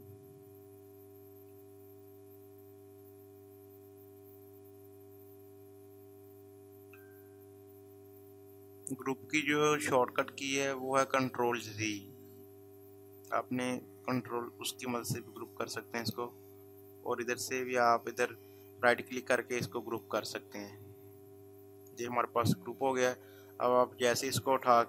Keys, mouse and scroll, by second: 16.0 right click, 19.8-24.8 drag.